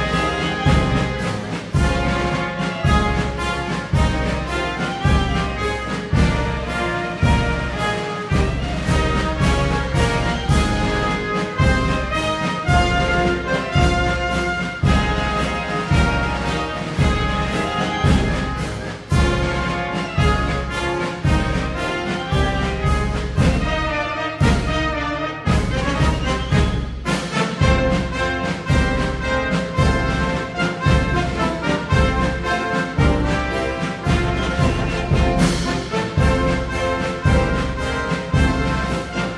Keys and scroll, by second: 30.5 Tab.